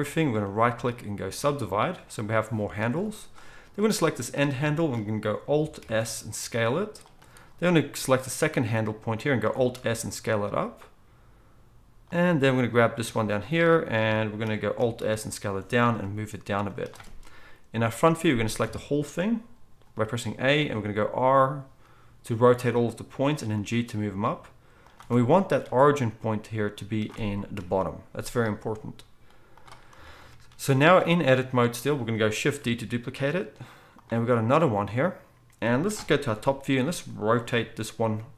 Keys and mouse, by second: 5.8 alt+s, 9.5 alt+s, 15.0 alt+s, 16.0 g, 17.7 KP_1, 18.6 a, 20.6 r, 23.5 g, 27.6 KP_1, 32.6 shift+d, 36.3 KP_7, 37.4 r.